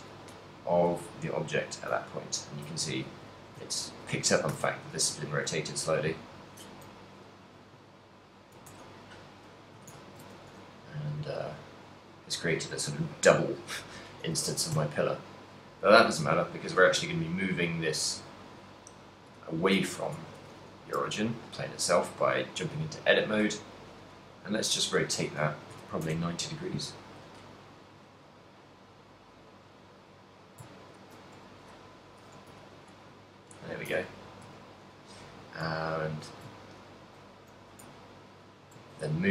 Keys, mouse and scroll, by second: 1.4 right click, 2.9 middle click, 3.4 shift+middle click, 3.7 ctrl+middle click, 4.6 ctrl+a, 7.0 z, 7.5 right click, 8.1 right click, 8.8 ctrl+a, 9.8 z, 10.3 ctrl+middle click, 10.3 a, 10.9 right click, 11.7 g, 11.8 right click, 12.9 middle click, 14.1 middle click, 14.5 a, 14.9 z, 15.3 right click, 15.9 right click, 18.4 KP_3, 19.4 KP_7, 20.1 Tab, 21.0 g, 23.9 right click, 24.6 ctrl+middle click, 25.3 r, 27.9 right click, 28.1 r, 30.1 right click, 31.0 ctrl+m, 34.0 click, 34.0 z, 34.5 z, 35.9 ctrl+middle click, 37.2 ctrl+middle click, 37.6 g.